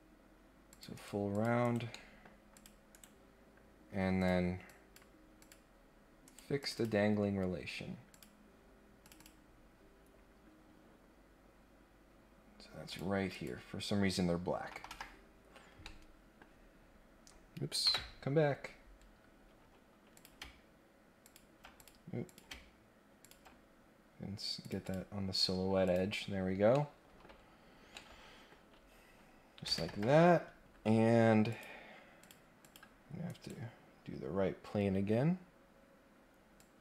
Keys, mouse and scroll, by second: 0.7 click, 0.9 right click, 1.3 click, 1.6 right click, 1.9 middle click, 2.5 click, 2.9 right click, 4.2 click, 4.6 click, 5.3 click, 6.2 right click, 6.6 click, 6.7 click, 8.1 click, 9.0 click, 9.2 click, 12.8 click, 13.3 click, 14.8 Delete, 15.5-15.8 scroll down 2, 15.8 middle click, 16.3-17.0 scroll up 2, 18.4 scroll up 1, 18.6 scroll down 2, 18.8-19.4 scroll up 2, 20.1 click, 21.2 ctrl+click, 21.7 click, 22.3 click, 23.2 ctrl+click, 24.6 click, 24.8 click, 25.8 click, 26.7 middle click, 27.2 scroll up 1, 27.5 scroll down 1, 27.9 middle click, 28.5 scroll up 1, 28.8 scroll down 1, 29.1 scroll up 1, 31.5 click, 32.2 click, 32.6 click, 33.3 right click, 36.5 click.